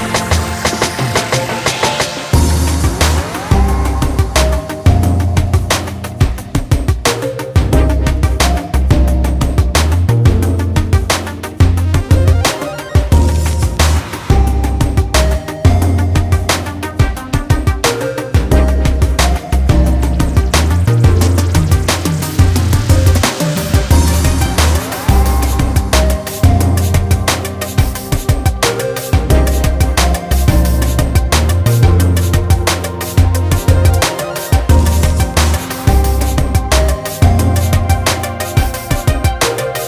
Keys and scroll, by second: 2.0-3.7 ctrl+space, 3.8 ctrl+space.